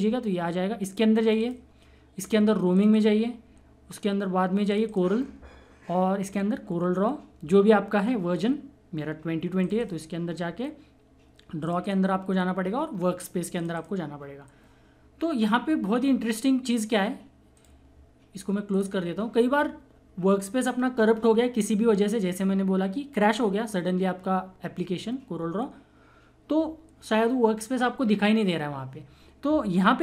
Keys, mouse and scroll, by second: 1.1 click, 1.1 typing, 9.6 click, 17.5 click, 17.5 typing.